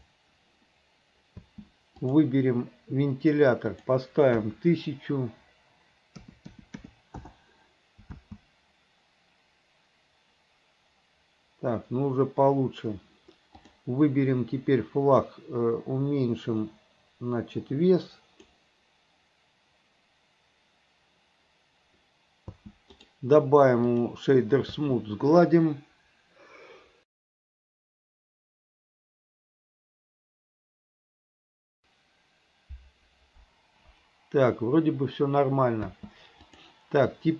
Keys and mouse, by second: 1.5 space, 2.2 click, 3.9-7.4 drag, 6.7 KP_0, 8.3 space, 13.7 click, 16.8-18.6 drag, 22.6 space, 23.2-24.3 right drag, 24.9 space, 36.0 space, 36.7 click.